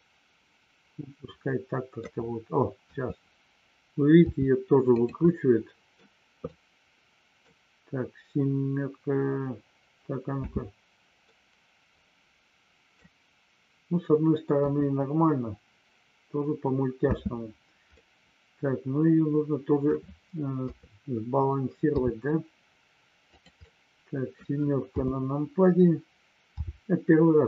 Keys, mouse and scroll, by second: 2.9 KP_3, 4.3 r, 4.9 click, 5.3 middle click, 6.4-7.4 middle drag, 10.4 space, 11.1-12.9 middle drag, 14.5 KP_1, 18.0-19.9 middle drag, 20.6 KP_3, 21.9 r, 23.3 click, 23.6 middle click, 24.9 KP_7, 26.5 r.